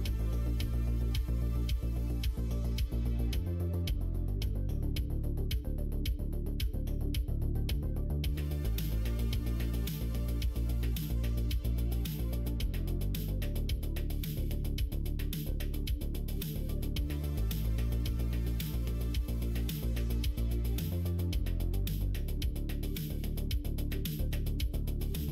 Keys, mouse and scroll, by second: 1.0 shift+click, 1.2 middle click, 2.3 shift+click, 2.6 q, 3.6 middle click, 6.3 3, 7.0 alt+click, 7.4 alt+click, 7.9 middle click, 9.2 alt+shift+click, 9.6 q, 10.3 q, 11.0 click, 11.6 click, 11.9 middle click, 13.3 click, 14.3 click, 15.0 click, 15.4 Tab, 15.9-17.3 middle drag, 17.8 middle click, 18.5 middle click, 19.1 middle click, 20.5 click, 20.9 Tab, 21.5 click, 22.1 middle click, 23.1 click, 24.3 click, 25.2 Tab.